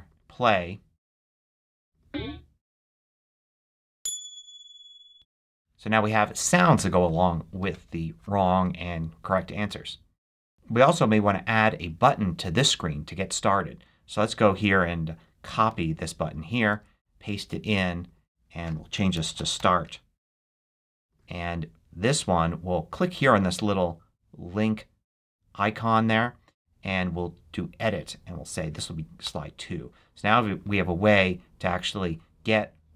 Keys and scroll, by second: 5.8 Escape, 15.6 super+c, 16.6 super+v, 18.6-20.3 typing, 28.6 2, 29.1 Return.